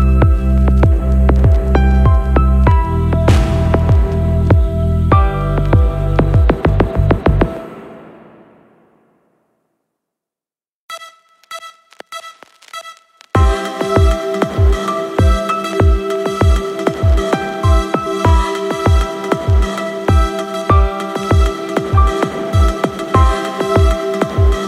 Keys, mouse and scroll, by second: 1.8-3.0 right drag, 4.8 click, 5.4 space, 11.2 space, 12.8 click, 14.3 click, 15.4 click, 17.5 right click, 18.6 scroll up 2, 19.0-19.7 shift+middle drag, 20.3 click, 22.7 click.